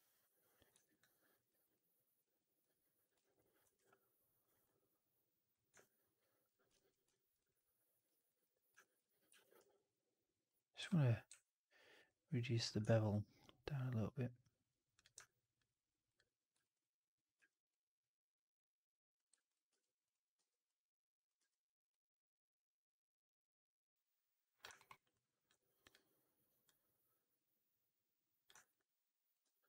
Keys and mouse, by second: 0.7 right click, 0.9-1.2 drag, 1.4 right drag, 1.6-2.1 drag, 3.1 alt+right click, 3.3 alt+click, 5.9 middle click, 6.1 alt+middle click, 6.6 ctrl+z, 7.0 alt+middle drag, 7.3 right drag, 7.4-7.8 drag, 7.9 right drag, 8.2 drag, 8.7 drag, 9.2 4, 9.5 q, 10.4-10.7 drag, 10.7 q, 15.1-15.5 alt+drag, 16.0-16.4 drag, 16.5 alt+drag, 19.0 click, 19.2 alt+drag, 19.6 3, 20.2 w, 21.3 r, 24.2 click, 24.6 alt+middle click, 24.8 alt+middle click, 25.0 alt+click, 28.5 alt+right click, 28.6 alt+click.